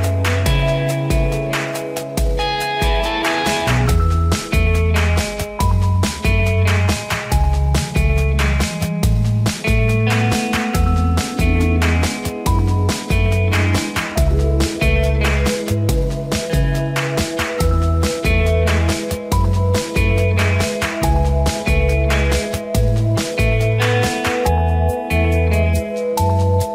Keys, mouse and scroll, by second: 0.1 click, 2.2 ctrl+=, 2.9 click, 3.3 scroll down 1, 3.9 scroll, 3.9 scroll up 1, 4.3 scroll down 1, 5.0 click, 5.7 ctrl+d, 6.3 scroll down 1, 6.8-7.3 scroll up 1, 9.6 ctrl+=, 12.9-24.9 drag, 24.9 Up, 25.2 Up, 25.5-26.7 drag.